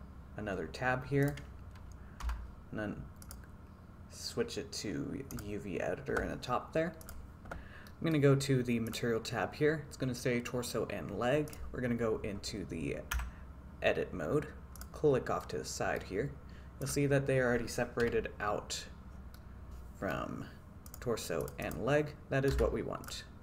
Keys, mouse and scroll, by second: 1.3 click, 2.3 t, 3.3-5.4 drag, 7.9-8.3 middle drag, 9.0 click, 11.5 click, 13.4 Tab, 15.4 middle click, 17.0 click, 18.1 KP_5, 19.4 middle click, 20.9 middle click, 21.7 click, 22.6 a, 23.1 middle click.